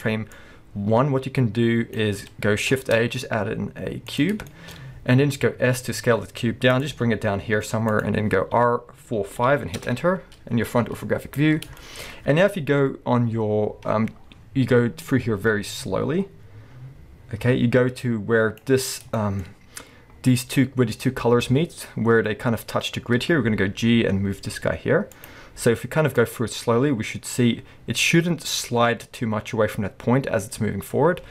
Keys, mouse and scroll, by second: 0.4-4.5 drag, 2.8 shift+a, 4.5-6.7 shift+middle drag, 4.8-5.7 scroll up 2, 5.7 s, 6.8 click, 6.9 g, 8.0 click, 8.6 r, 10.6-11.3 scroll down 1, 11.3-11.8 scroll up 1, 11.8-15.1 shift+middle drag, 15.1-19.2 drag, 18.8-19.2 scroll up 2, 19.2-25.3 shift+middle drag, 19.5-23.5 scroll up 2, 23.7 g, 25.3 click, 25.5-26.1 scroll down 2, 26.1-31.3 drag.